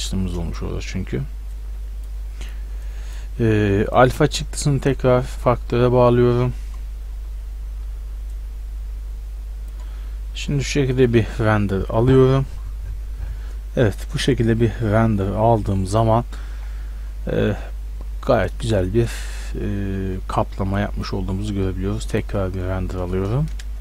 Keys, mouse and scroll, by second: 2.8-5.7 drag, 6.7 middle click, 8.4-10.1 drag, 11.0-12.8 drag, 20.8-23.8 drag.